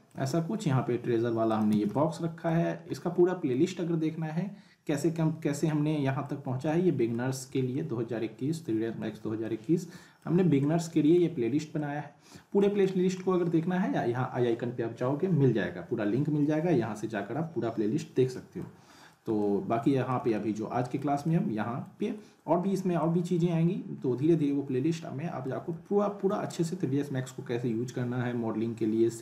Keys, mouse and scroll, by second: 0.3-1.0 scroll up 1, 1.5 click, 1.7 z, 1.9-2.5 alt+middle click, 2.6 scroll down 1, 2.9-3.5 alt+middle drag, 5.1-5.5 scroll down 1, 5.6-6.2 alt+middle click, 6.4 scroll up 1, 6.6-7.2 alt+middle click, 7.3 scroll down 1, 7.7-9.2 alt+middle drag, 10.4 scroll up 1, 10.6-11.2 middle click, 11.7-12.7 alt+middle click, 13.1-13.4 alt+middle drag, 18.3-20.3 middle drag.